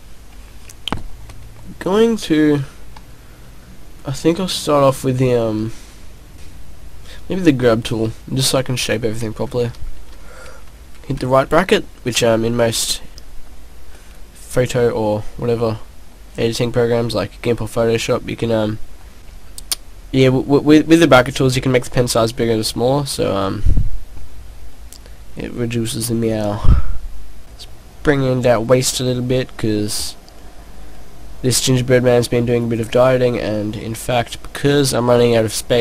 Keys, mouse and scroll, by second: 3.1 click, 9.6 ], 9.7 ], 10.1 ], 10.2 ], 12.4 click, 13.2 click, 13.7 click, 14.5 right click, 15.3 middle click, 17.1 click, 17.3 click, 17.6 click, 18.6 click, 19.4 click, 21.7 click, 24.2 click, 24.6 middle click, 27.4 click, 28.0 click, 28.9 click, 29.5 click, 30.9 click, 31.6 click, 32.7 middle click.